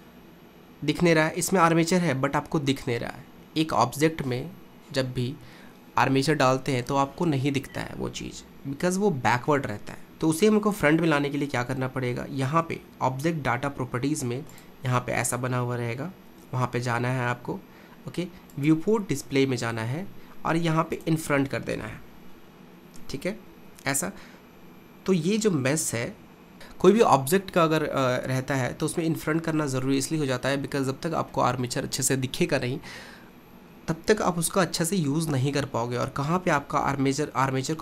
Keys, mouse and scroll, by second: 14.5 click, 18.5-21.1 drag, 22.7-25.3 scroll up 1.